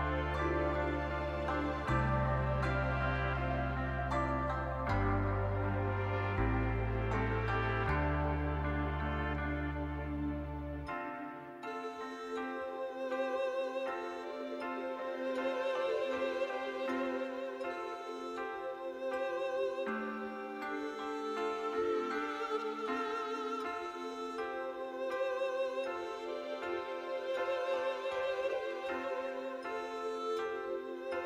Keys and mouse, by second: 0.7 click, 1.9 shift+click, 3.5 middle click, 4.1 shift+middle click, 4.5 click, 6.3 click, 6.9 click, 7.1 click, 7.5 shift+click, 7.8 click, 8.8 click, 9.8 shift+click, 10.8 click, 11.3 shift+click, 11.8 shift+click, 12.2 click, 13.1 shift+click, 13.4 click, 14.2 shift+middle click, 14.5 click, 14.5 middle click, 15.6 middle click, 16.6 shift+click, 17.4 shift+click, 17.7 click, 19.0 click, 19.3 shift+click, 19.7 click, 21.1 click, 21.9 shift+click, 22.2 shift+click, 22.2 middle click, 22.6 middle click, 23.2 shift+click, 25.1 shift+click, 25.9 middle click, 26.5 shift+click, 27.1 click, 27.6 shift+click, 29.4 shift+click, 29.7 click, 31.0 click.